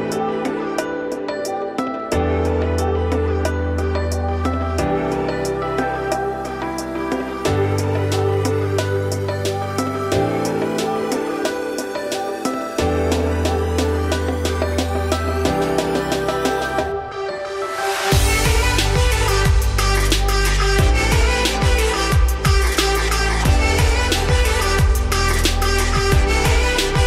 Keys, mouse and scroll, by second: 1.0 z, 1.5-2.7 shift+middle drag, 2.7 s, 5.5 scroll down 3, 5.6-6.7 middle drag, 6.7 `, 7.4 scroll down 1, 7.4-9.2 shift+middle drag, 9.2 g, 10.4 Tab, 10.9 g, 13.0 z, 13.3 scroll down 1, 13.3-13.8 middle drag, 13.8 scroll up 2, 14.0 Tab, 14.3 middle click, 14.8 Tab, 15.0 `, 15.6 shift+middle click, 15.8 scroll up 3, 15.9 Tab, 16.3 z, 16.5 scroll up 1, 17.1 g, 18.3 z, 18.6 middle click, 19.1 `, 19.4-20.6 middle drag, 20.6-21.0 scroll up 1, 21.0 shift+middle click, 21.4 g, 24.1-26.0 middle drag, 26.0 scroll down 4, 26.3 middle click, 26.8 `.